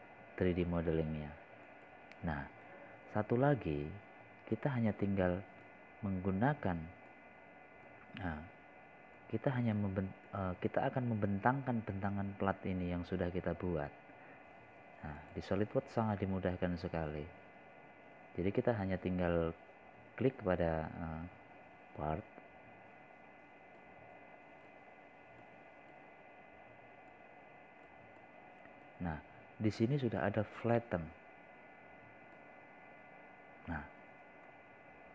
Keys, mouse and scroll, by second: 0.1 scroll down 1, 2.0 scroll up 1, 2.7 scroll down 1, 4.7 click, 5.5 scroll up 1, 6.2-6.6 scroll down 1, 7.6-8.9 drag, 12.0 click, 14.4 scroll down 1, 18.2 click, 20.1 scroll down 1, 20.7-21.1 scroll up 1, 21.5 scroll down 1, 22.9 scroll up 1, 26.8-28.2 drag.